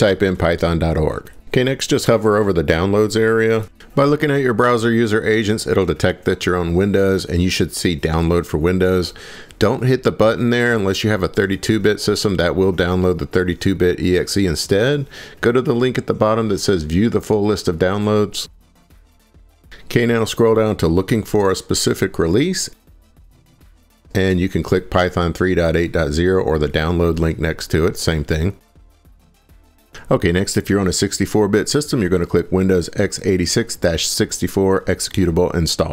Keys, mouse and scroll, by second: 0.4 Return, 20.5 click, 21.4 scroll, 23.9 click, 29.7-31.7 scroll, 31.9-33.0 scroll, 34.4 click.